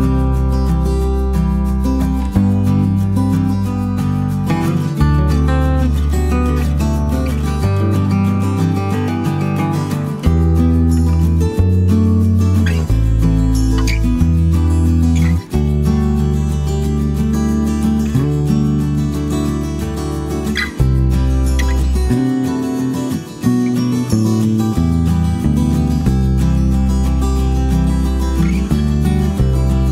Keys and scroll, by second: 3.1-7.9 typing, 17.8-22.2 typing, 26.2 super+c, 27.9-28.9 typing.